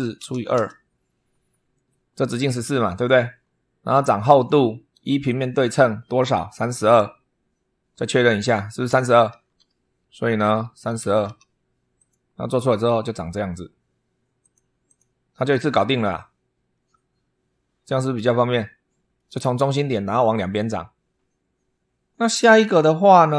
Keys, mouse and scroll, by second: 0.0-0.6 typing, 2.7 click, 4.1 click, 5.1 click, 9.1 super+3, 10.3 click, 10.5-11.5 typing, 11.7 click, 12.3 middle click, 14.2 click, 14.6 click, 15.1-19.1 middle drag.